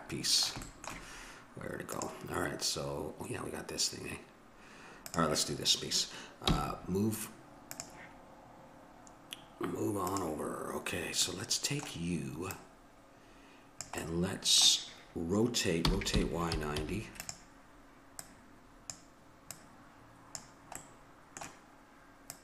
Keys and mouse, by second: 1.9-3.8 drag, 5.1-6.9 drag, 6.5 m, 10.1-11.8 drag, 11.3-13.9 middle drag, 11.3 right click, 12.5-14.3 drag, 14.2-15.9 middle drag, 15.9 r, 18.3-21.2 drag, 20.8 middle click, 22.3-22.4 drag, 22.3-22.4 middle drag.